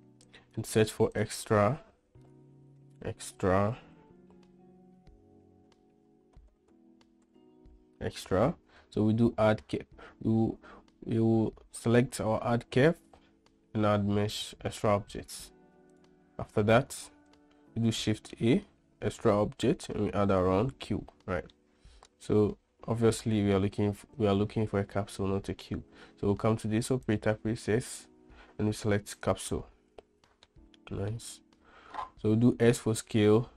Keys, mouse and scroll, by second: 17.7 shift+a, 21.9-23.8 middle drag, 27.4-29.8 drag, 30.9-31.4 middle drag, 32.7 s.